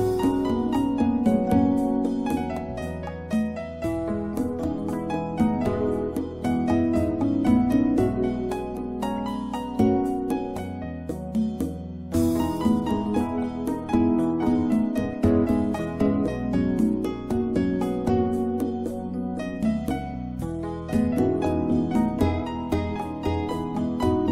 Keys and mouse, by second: 2.3 e, 2.6 x, 4.6 r, 8.2 click, 12.7 drag, 18.9-20.2 right drag, 20.2-20.7 middle drag, 20.7 click, 22.3-23.8 drag.